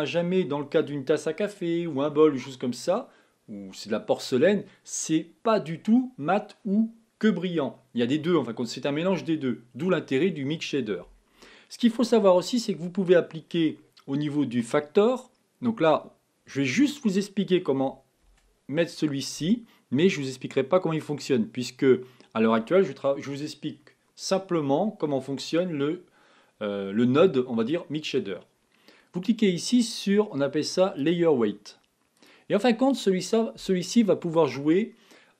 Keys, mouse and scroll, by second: 9.7 click, 9.9 click, 12.5 click, 32.1-33.4 drag.